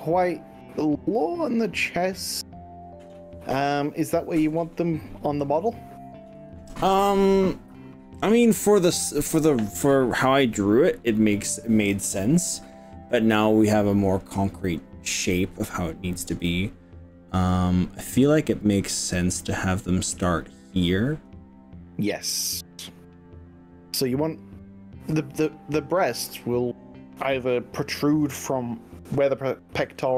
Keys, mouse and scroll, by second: 17.8-18.8 scroll up 5.